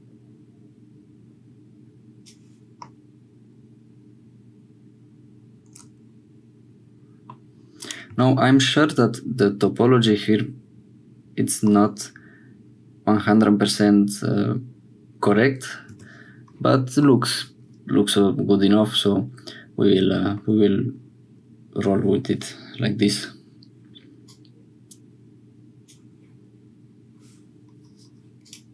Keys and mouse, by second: 2.8-7.3 middle drag, 7.7 middle click, 8.1 Tab, 11.7-13.8 middle drag, 15.9 Tab, 17.1-20.4 middle drag, 24.2-25.8 drag, 28.4 click.